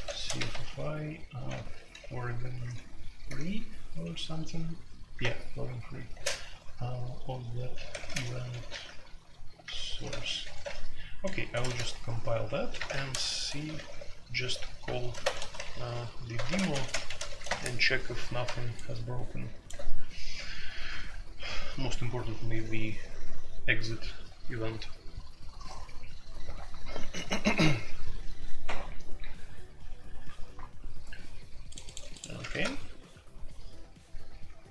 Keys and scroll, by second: 0.0-0.3 typing, 1.5-4.0 typing, 5.2-6.1 typing, 7.7-13.3 typing, 13.8 alt+p, 13.8 alt+o, 15.2 ctrl+shift+BackSpace, 15.4-17.7 typing, 32.5 super+c.